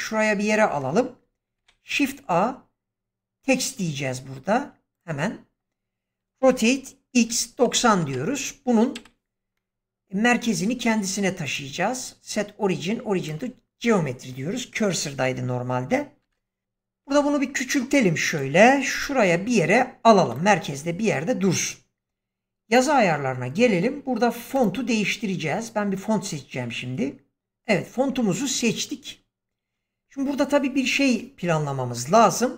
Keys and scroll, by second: 1.5 shift+a, 6.3 r, 7.1 x, 7.9 Return, 8.9 ,, 16.1 0, 16.9 s, 18.9 g.